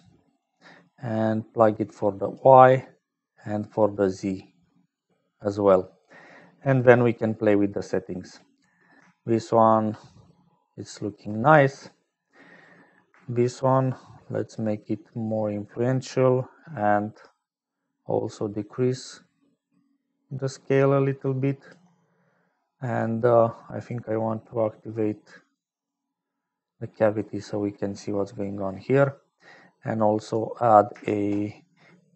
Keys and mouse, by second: 0.0-32.1 typing, 1.5-2.5 drag, 3.3-5.0 drag, 9.4-11.1 shift+drag, 12.2 click, 13.9-15.3 shift+drag, 15.3 shift+right click, 17.6-21.7 shift+drag, 22.7 click, 23.8-25.5 drag, 25.7 click, 26.7 click, 28.1 middle click, 29.1 middle click, 29.9 click.